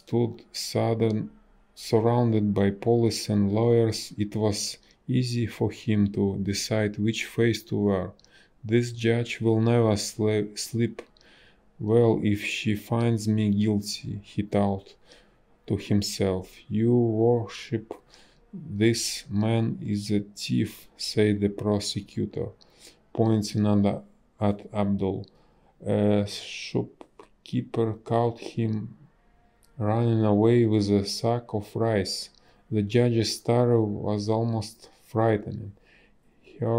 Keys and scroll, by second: 5.4 ctrl+z, 5.8 ctrl+z, 6.5 ctrl+z, 7.3 space, 15.0 space, 15.9 a, 19.2 space, 23.4 space, 29.0 space, 34.4 space, 35.0 space.